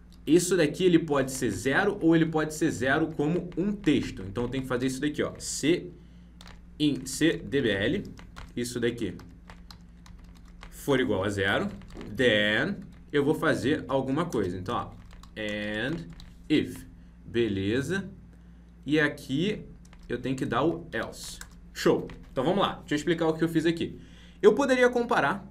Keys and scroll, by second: 3.7 ctrl+Left, 4.8 ctrl+Right, 9.4 ctrl+Left.